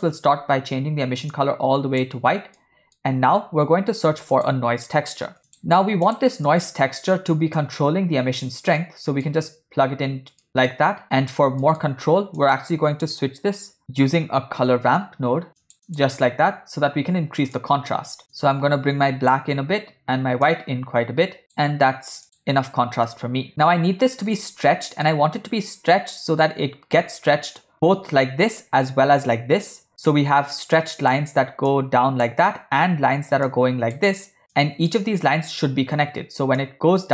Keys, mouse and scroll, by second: 0.0 click, 2.7 middle click, 3.6 shift+a, 6.5 middle click, 7.7-9.0 drag, 9.0 middle click, 10.5 middle click, 11.1 click, 11.7 middle click, 12.1 shift+a, 17.7-18.2 drag, 18.4 click, 20.5-21.5 drag, 22.3 click, 23.1-23.5 middle drag, 24.5-25.1 middle drag, 29.9 e, 30.6 click, 31.8 click, 33.5 click, 34.6 click, 36.7-37.1 drag.